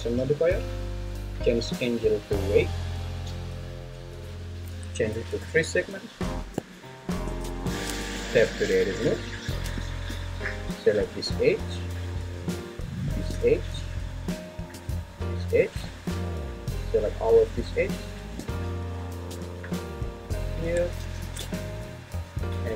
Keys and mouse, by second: 1.5-2.7 drag, 4.7 click, 7.6 shift+`, 8.0 Tab, 13.1 shift+click, 15.5-18.4 shift+drag, 21.1 ctrl+z, 22.0-22.7 shift+drag.